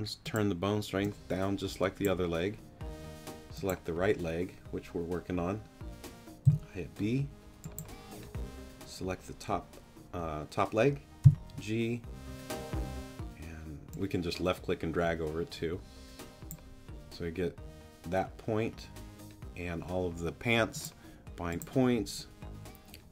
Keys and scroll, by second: 6.4 b, 11.2 g.